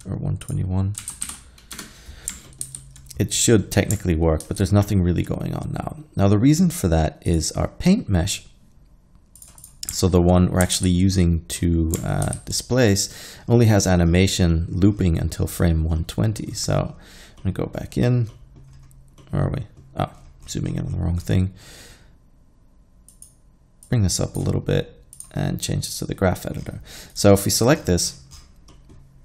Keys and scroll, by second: 1.1 1, 1.2 2, 1.3 1, 1.8 Return, 2.7 alt+a, 4.5 alt+a, 10.8 alt+a, 12.3 alt+a.